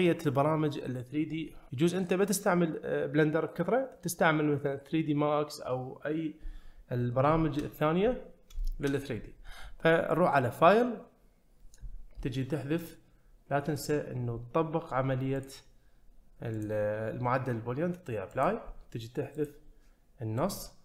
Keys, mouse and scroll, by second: 7.4 shift+middle click, 8.6 shift+middle drag, 12.8 click, 13.7 click, 15.4 click, 16.6-18.6 drag, 19.4 click.